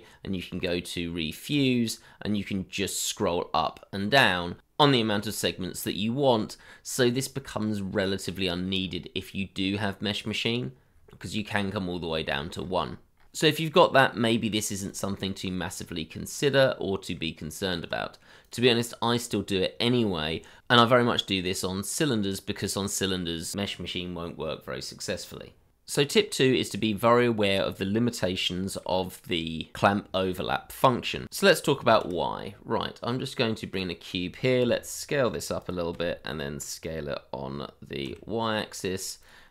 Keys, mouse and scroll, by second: 3.1-3.4 scroll up 1, 3.8-4.6 scroll down 1, 4.6-6.6 scroll up 1, 6.6-8.2 scroll down 1, 8.2-10.9 scroll up 1, 10.9-12.2 scroll down 1, 12.2-13.8 scroll up 1, 15.2 scroll down 1, 15.9 middle click, 17.3 Tab, 18.8-20.6 scroll up 1, 22.6 shift+middle click, 23.5 middle click, 28.3 shift+middle click, 31.9 shift+a, 34.6 s, 38.0 y.